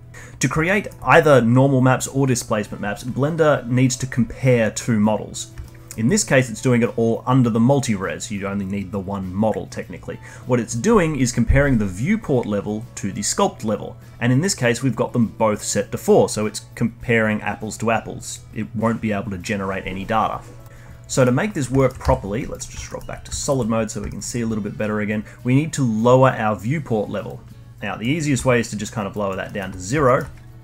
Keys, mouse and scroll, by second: 0.6 middle click, 5.6-8.6 alt+middle drag, 21.1 middle click, 21.7 alt+middle click, 22.0 z, 22.8-27.1 alt+middle drag, 27.2-28.6 drag, 28.6-29.1 alt+middle drag, 29.1 alt+click, 29.4-30.6 alt+middle drag.